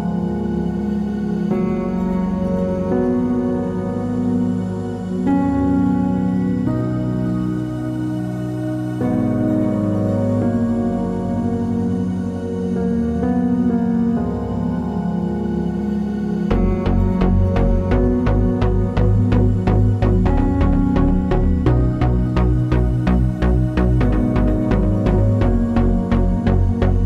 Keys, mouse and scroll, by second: 8.7 ctrl+[, 10.1 click, 13.7 KP_8, 13.8 KP_0, 13.9 KP_Enter, 15.7 v, 16.1 click, 18.1 ctrl+click, 19.9 KP_2, 20.1 KP_8, 20.3 KP_0, 20.4 KP_Enter, 21.9 click, 25.3 KP_Enter.